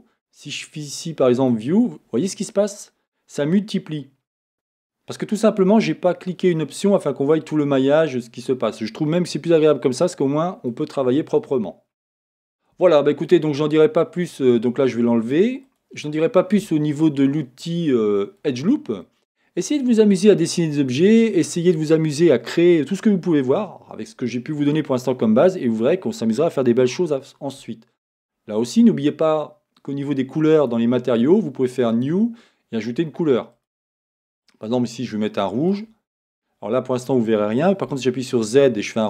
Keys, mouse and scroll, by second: 1.4 click, 4.5-15.7 middle drag, 12.8 Tab, 15.7 click, 16.4-30.6 middle drag, 30.6 click, 31.9-33.5 drag, 33.5 middle click, 33.6 click, 33.7-39.0 middle drag, 37.9 z.